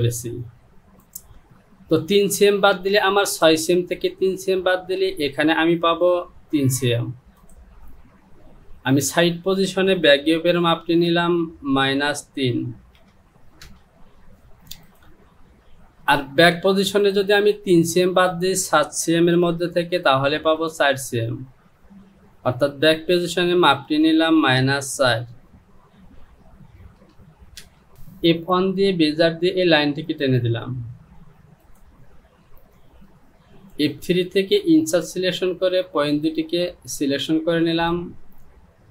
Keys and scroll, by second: 6.6 Home, 11.2 Down, 11.9 KP_Subtract, 13.0 KP_3, 13.7 Return, 19.8 ctrl+z, 23.8 Down, 24.7 KP_Subtract, 27.0 KP_4, 27.6 Return.